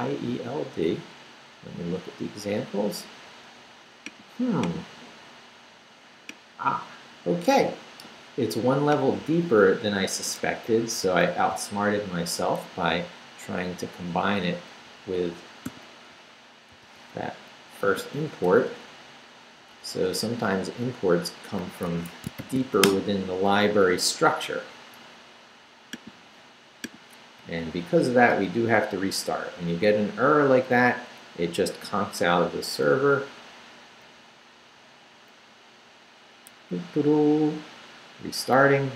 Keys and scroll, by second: 11.7 super+c, 13.5 Down, 14.9 Up, 15.7 o, 16.7 super+v, 17.3 super+Up, 17.8 Right, 18.0 a, 18.4 BackSpace, 21.9 Escape, 22.4 shift+;, 22.6 shift+w, 22.8 Return, 27.4 Up, 28.1 Return.